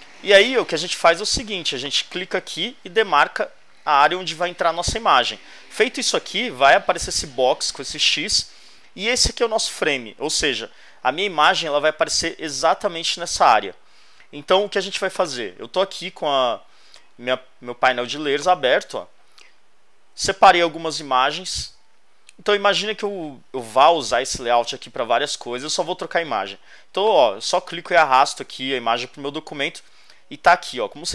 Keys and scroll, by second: 19.4 super+Tab.